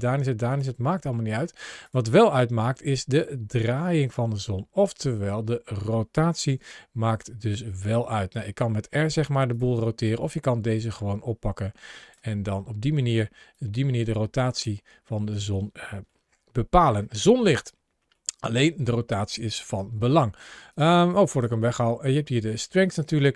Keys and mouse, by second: 0.3 click, 0.8 middle click, 1.2 g, 1.7 click, 2.4 click, 5.4 middle click, 6.3 r, 6.4 r, 9.3 click, 9.9 click, 12.2-12.8 middle drag, 13.4 click, 16.0-16.8 shift+middle drag, 17.2 shift+middle click, 17.9-18.4 shift+middle drag, 19.6 x, 20.6-21.0 right drag, 21.1 click, 22.4 click.